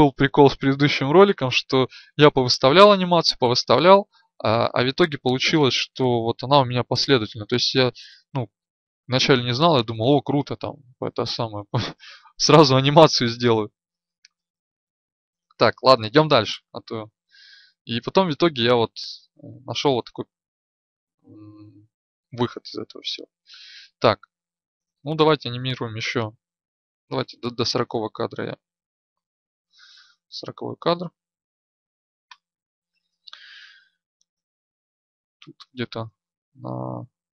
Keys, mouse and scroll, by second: 16.0 Right, 16.2 Right, 17.1 Right, 23.6 Left, 24.1 Left, 24.7-25.6 Left, 26.2-26.6 Left, 33.6-34.2 Right, 34.5-35.2 Right.